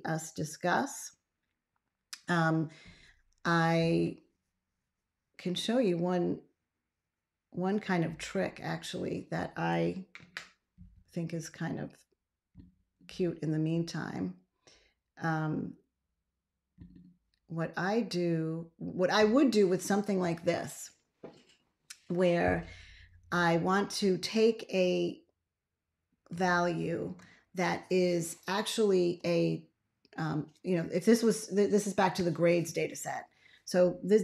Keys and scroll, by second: 26.2 ctrl+a.